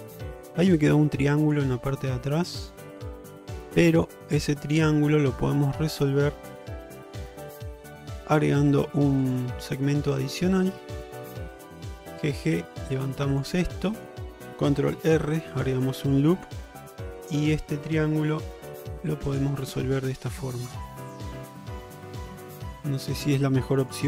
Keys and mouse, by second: 0.2 middle click, 1.5 click, 1.8 g, 3.1 middle click, 4.2-6.6 middle drag, 7.8 2, 8.5 middle click, 9.6 middle click, 11.1 shift+click, 12.2 g, 13.7 middle click, 15.2 ctrl+r, 16.9 1, 17.7 middle click, 18.5 g, 19.9-22.8 middle drag, 23.9 click.